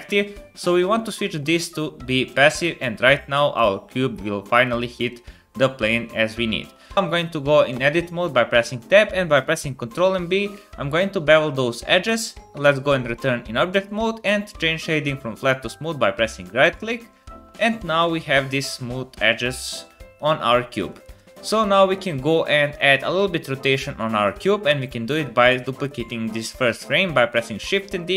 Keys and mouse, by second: 5.1-6.8 drag, 6.8 space, 6.9 Tab, 7.7 Tab, 9.9 ctrl+b, 12.5 Tab, 20.7 shift+middle click, 21.6 shift+middle click, 27.1 shift+d.